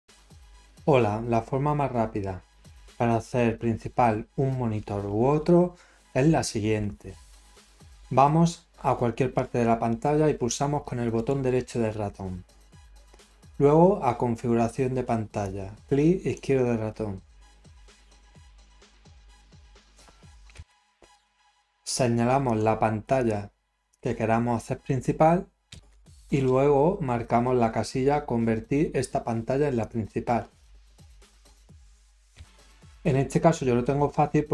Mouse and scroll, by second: 11.1 right click, 15.4 click, 21.5 scroll, 22.4 click, 23.1 drag, 23.9 drag, 27.1 scroll up 1, 29.8 click.